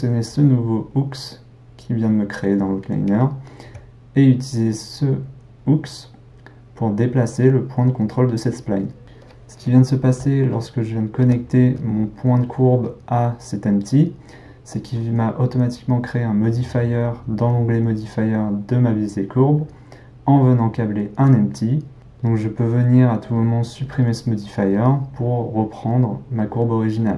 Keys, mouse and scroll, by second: 0.3 click, 3.2-3.7 middle drag, 3.7 g, 9.6-13.5 middle drag, 23.8-26.8 drag.